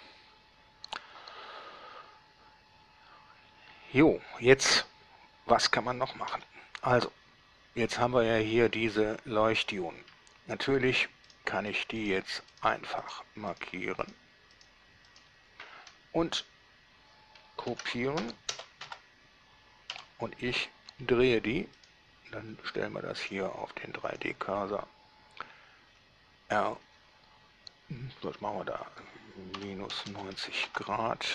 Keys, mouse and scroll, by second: 6.5 Escape, 8.6-10.0 middle drag, 11.5 right click, 12.2 shift+right click, 12.8 shift+right drag, 13.8 shift+drag, 14.3 shift+drag, 15.4 shift+drag, 17.9 shift+d, 18.4 x, 18.8 0, 19.1 Return, 20.2 7, 21.1 r, 22.0 middle drag, 23.4 click, 24.4 click, 26.1 r, 29.8 -, 30.2 9, 30.4 KP_0, 30.9 Return.